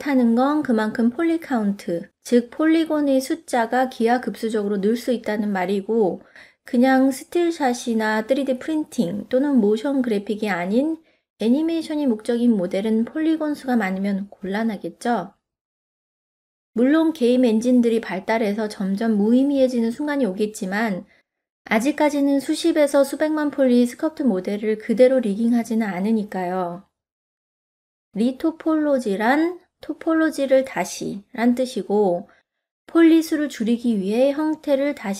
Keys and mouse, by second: 0.1 ctrl+middle click, 0.5 middle click, 1.1 middle click, 1.7 click, 2.2 middle click, 3.1 alt+a, 3.5 middle click, 3.6-4.7 d, 3.8 click, 4.4 click, 4.6 click, 4.9 click, 5.1 middle click, 5.4 click, 6.0 middle click, 6.2 e, 6.5 ctrl+z, 6.5 click, 6.7 e, 6.9 middle click, 7.1 middle click, 7.7 click, 8.0 click, 8.2 click, 8.4 e, 8.7 click, 8.9 f, 9.2 middle click, 9.3 f, 9.6 click, 9.7 ctrl+z, 9.9 ctrl+z, 10.0 middle click, 10.3 ctrl+r, 10.5 right click, 10.7 f, 10.8 click, 11.2 middle click, 11.2 f, 11.6 middle click, 11.8 ctrl+r, 12.0 right click, 12.2 t, 12.5 f, 12.7 click, 12.8 t, 13.0 click, 13.6 f, 13.7 click, 14.2 middle click, 14.5 click, 14.6 f, 15.1 f, 15.6 middle click, 16.0 click, 16.5 click, 16.7 e, 16.8 click, 17.6 click, 18.0 click, 18.5 e, 18.8 click, 18.9 middle click, 19.0 ctrl+z, 19.2 ctrl+middle click, 19.4 middle click, 19.5 click, 19.8 e, 20.2 click, 20.8 click, 20.9 f, 21.0 middle click, 21.2 click, 21.6 click, 21.7 click, 21.9 click, 22.3 middle click, 22.6 middle click, 23.0 middle click, 23.3 ctrl+f, 23.7 click, 24.1 middle click, 24.9 ctrl+middle click, 25.1 middle click, 25.7 ctrl+Tab, 26.2 click, 26.6 click, 27.0 f, 27.5 shift+click, 28.0 middle click, 28.2 shift+click, 28.9 shift+click, 29.5 shift+click, 30.7 middle click, 31.2 shift+click, 32.1 Tab, 32.2 middle click, 32.6 click, 32.8 middle click, 33.2 click, 33.6 middle click, 33.9 middle click, 34.1 click, 34.4 click, 34.8 click.